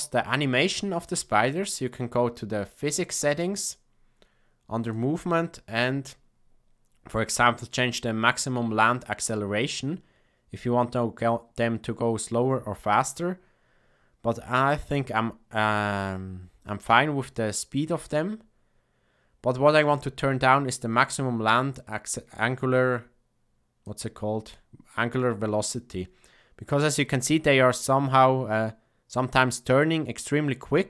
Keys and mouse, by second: 2.9 drag, 4.8 drag, 23.9 click.